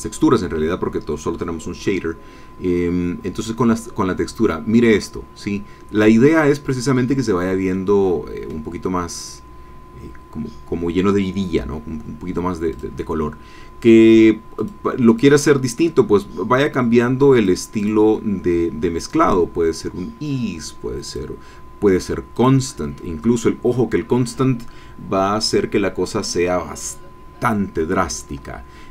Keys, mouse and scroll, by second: 7.7 click, 12.7 click, 14.6 click, 15.1 click, 17.3 click, 17.8 click, 19.2 click, 21.1 click, 28.1 click.